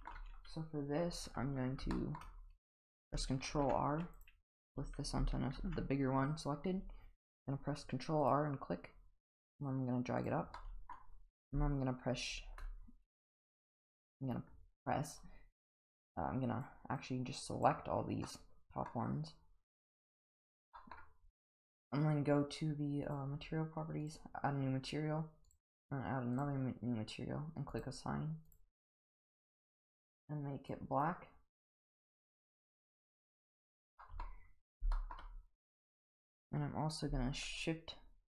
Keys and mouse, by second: 1.2 Tab, 1.9 shift+middle click, 3.5 ctrl+r, 5.6 ctrl+r, 10.5 middle click, 15.1 click, 15.7 click, 17.0 click, 18.2 middle click, 20.2 click, 20.8 middle click, 23.0 click, 24.0 click, 25.5 click, 26.4 click, 27.7 click, 32.1 click, 34.0 middle click, 34.9 shift+middle click, 36.3 click.